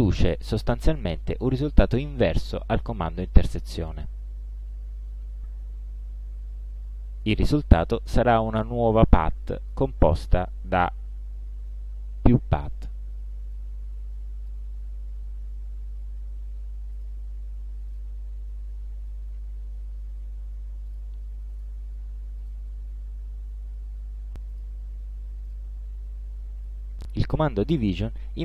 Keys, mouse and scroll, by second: 0.1 click, 0.8 click, 9.1 click, 10.9 ctrl+click, 11.4 ctrl+alt+scroll up 2, 13.6-14.8 drag, 17.0 click, 18.0 click, 21.0 shift+click, 21.7 shift+click, 22.5 shift+click, 24.9 click, 26.1 click.